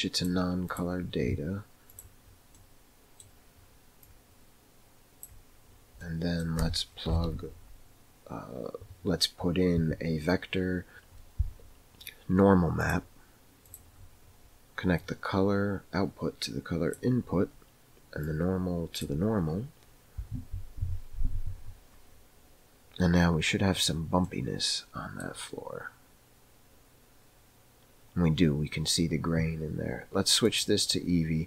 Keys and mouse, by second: 0.1 click, 0.6-2.0 drag, 2.5 middle click, 4.0-5.2 drag, 6.0 middle click, 7.1 shift+a, 12.9 click, 15.0-16.9 drag, 18.2 click, 24.6 middle click, 30.6 click.